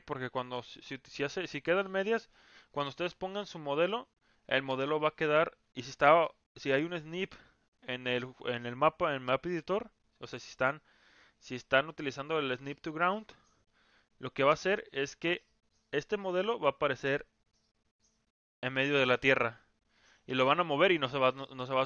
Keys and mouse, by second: 17.2-19.2 drag.